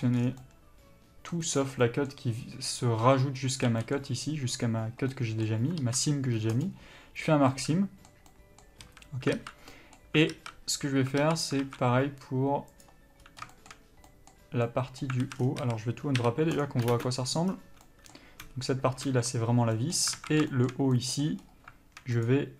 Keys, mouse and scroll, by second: 2.1-4.5 middle drag, 5.4-13.0 middle drag, 9.1 a, 11.9 alt+a, 13.0 click, 13.5 scroll up 1, 13.8-15.1 shift+middle drag, 15.8 a, 20.4 alt+a, 20.7 shift+middle click.